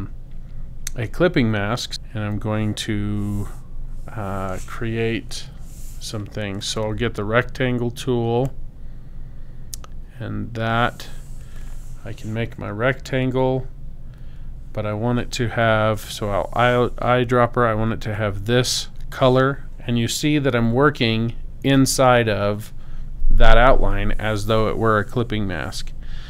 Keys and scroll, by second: 2.2 i, 5.4 m, 15.6 i.